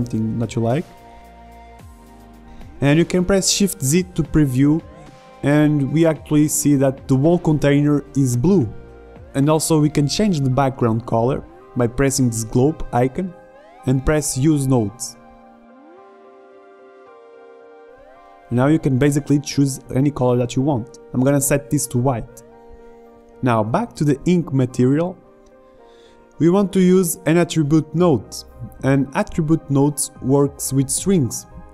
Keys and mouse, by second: 0.5-7.0 drag, 3.8 shift+z, 12.8-20.9 drag.